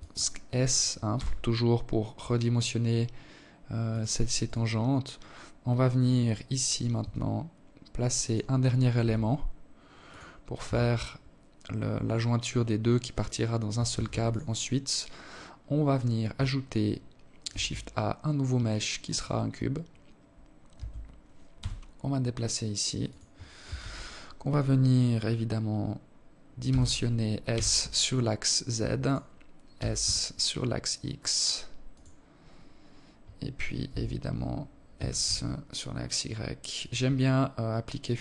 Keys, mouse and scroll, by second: 2.9 right click, 5.4 g, 7.5 r, 9.1 Tab, 9.6-10.6 scroll down 3, 12.3 ctrl+s, 13.5-14.1 scroll down 3, 14.2 scroll up 2, 15.9 shift+a, 19.1 Tab, 19.9 g, 22.1 KP_1, 25.1 s, 28.2 s, 32.3 KP_3, 33.3 s, 35.6 alt+click, 36.9-37.3 scroll up 4.